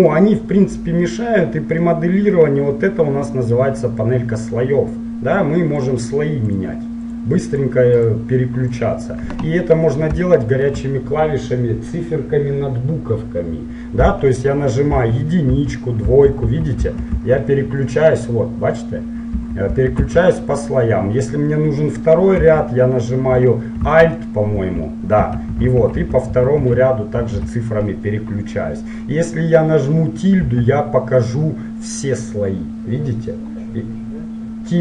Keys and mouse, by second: 5.9-10.4 drag, 10.4-12.2 middle drag, 15.1-17.2 typing, 19.5 7, 19.8 8, 20.1 9, 24.6 alt+1, 25.4 alt+2, 25.8 alt+3, 26.1 alt+4, 26.4 alt+5, 26.7 alt+6, 27.2 alt+7, 30.6 `.